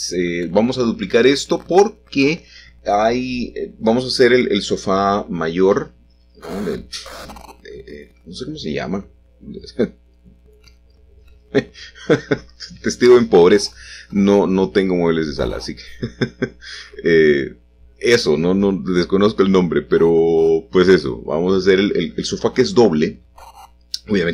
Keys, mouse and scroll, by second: 2.3 shift+click, 10.7 click, 11.6 g, 12.1 z, 19.4 shift+click, 22.2-22.8 scroll up 1, 22.8-24.3 middle drag.